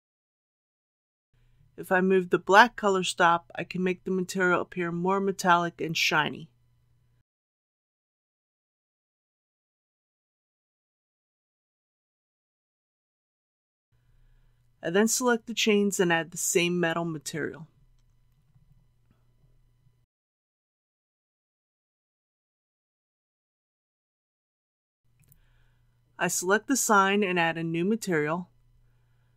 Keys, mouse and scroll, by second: 25.0 click, 27.8-28.3 typing, 28.6 Return.